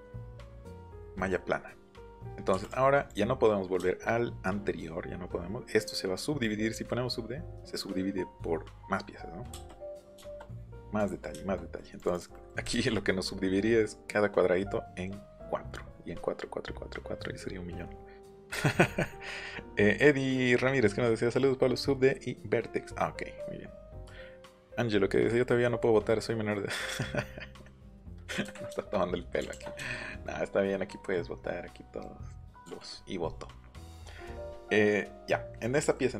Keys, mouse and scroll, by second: 0.4 click, 1.2-1.7 scroll down 2, 2.6 click, 3.1 click, 9.5 space, 9.7 middle click, 10.2 shift+middle click, 10.5 click, 11.0 click, 11.4 shift+middle click, 11.7 middle click, 12.0 click, 12.1 click, 12.3 scroll up 1, 12.6 ctrl+scroll down 1, 12.9 scroll up 1, 13.2 scroll down 1, 15.8-16.2 scroll up 2, 17.0 middle click, 17.5 middle click, 27.6 middle click, 28.0 Escape, 28.4 Escape, 30.7 middle click, 31.1 middle click, 32.6 middle click, 32.7 c, 35.8 middle click.